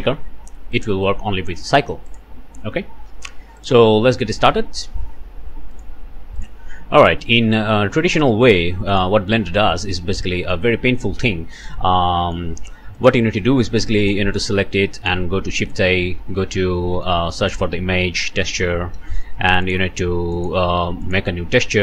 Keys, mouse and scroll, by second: 0.7 click, 2.1 middle click, 2.7 scroll down 1, 3.6 middle click, 4.2 middle click, 5.7 middle click, 6.4 middle click, 7.4 scroll up 1, 7.9 shift+click, 8.1 shift+middle click, 8.2 shift+scroll down 1, 8.6 middle click, 10.0 scroll down 1, 10.3 middle click, 10.7-11.2 scroll up 1, 11.5 click, 12.1 click, 13.0 click, 14.0 click, 14.9 shift+click, 15.3 shift+a, 17.5 click, 18.3 i, 18.5 m, 18.9 Return, 19.6 click, 20.3-21.3 drag.